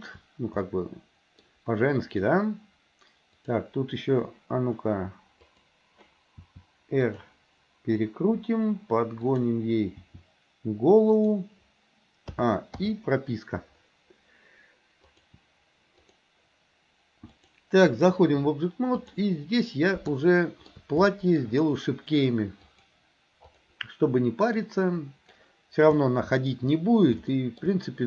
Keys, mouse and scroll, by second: 0.7 middle click, 3.5 click, 5.5 click, 6.4 r, 9.3 click, 10.0 r, 12.3 a, 12.8 i, 15.1 click, 16.0 click, 17.3-18.2 drag, 19.0 click, 20.1 shift+middle click, 21.2 shift+middle click, 22.8 click, 23.5 click, 24.6-25.4 drag, 26.0-26.6 shift+middle drag, 27.3 shift+middle click.